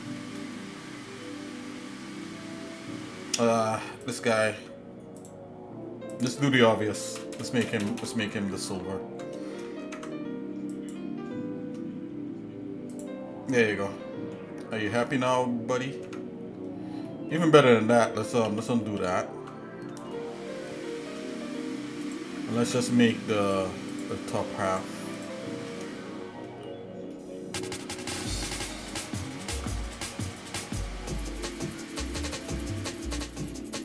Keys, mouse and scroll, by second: 0.6 middle click, 1.3 shift+middle click, 1.9 middle click, 2.8-3.7 scroll up 3, 4.0 click, 4.6 Tab, 5.2 click, 6.3 click, 7.2 ctrl+KP_Add, 7.5 ctrl+KP_Add, 7.9 ctrl+KP_Add, 8.1 ctrl+KP_Add, 9.8 ctrl+Tab, 13.0 click, 13.5 Tab, 14.0 middle click, 15.3 middle click, 16.0 Tab, 17.1 middle click, 17.9 ctrl+z, 18.6 ctrl+z, 18.9 ctrl+z, 19.0 ctrl+z, 20.1 shift+middle click, 22.1 click, 22.6 ctrl+Tab, 23.9 click, 24.7 alt+shift+click, 26.0 shift+middle click, 27.1 shift+middle click, 29.3 ctrl+r.